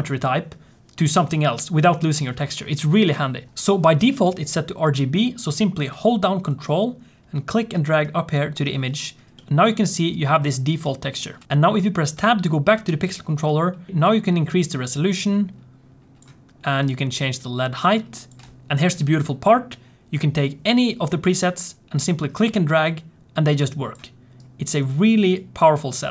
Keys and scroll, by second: 11.5 Tab.